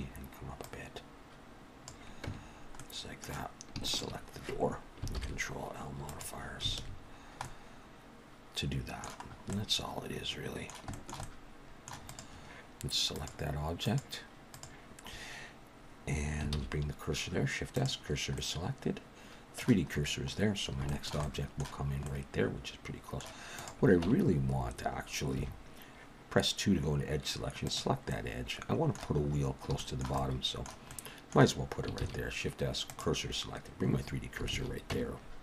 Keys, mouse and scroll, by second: 0.7 click, 2.3 Tab, 2.8 middle click, 3.8 shift+click, 5.1 ctrl+l, 6.8 alt+a, 7.1-8.1 scroll down 3, 7.4 middle click, 9.2-9.8 scroll up 3, 9.5 middle click, 10.9 shift+middle click, 11.2 middle click, 12.1 click, 13.1 click, 16.5 shift+s, 18.4 middle click, 19.9-20.5 scroll up 1, 20.5-20.9 scroll down 2, 20.9 shift+middle click, 21.2 middle click, 22.1 middle click, 23.6 click, 24.1 Tab, 25.4 2, 27.7 click, 28.1 middle click, 29.3-29.7 scroll up 3, 29.8 shift+middle click, 30.2 middle click, 30.9 middle click, 32.0 shift+s, 34.5 alt+a, 34.9 Tab.